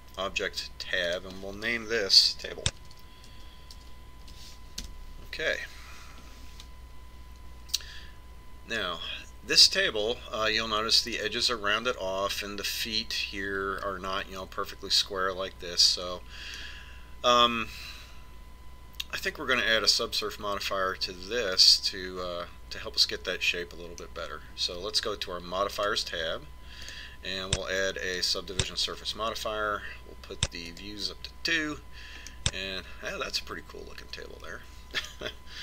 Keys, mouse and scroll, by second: 2.6 click, 18.2-19.9 middle drag, 27.4-30.3 drag, 32.4 click, 34.0-35.6 middle drag.